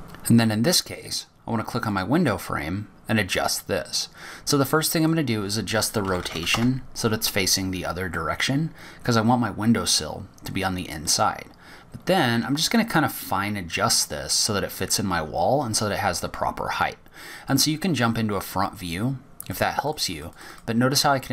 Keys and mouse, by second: 0.0-3.7 middle drag, 6.6 click, 9.8-11.2 drag, 12.9-18.8 middle drag.